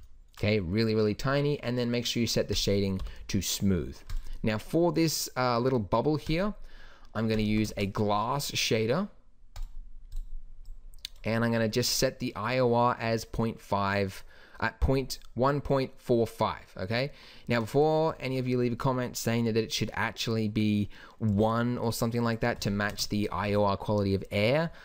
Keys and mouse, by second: 2.5 click, 3.0 t, 6.3 click, 7.5 x, 7.8 shift+a, 10.7 click, 17.8 click, 19.5-21.4 drag, 22.9 KP_0, 23.5 z.